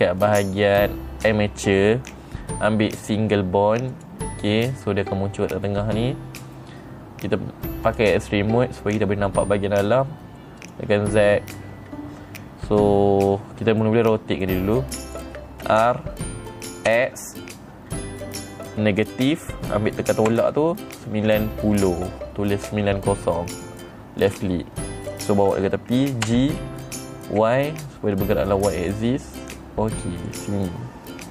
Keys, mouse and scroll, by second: 4.4 click, 8.3 click, 11.1 click, 13.7 middle click, 14.5 middle click, 16.2 r, 24.7 click, 26.8 g, 30.8 click.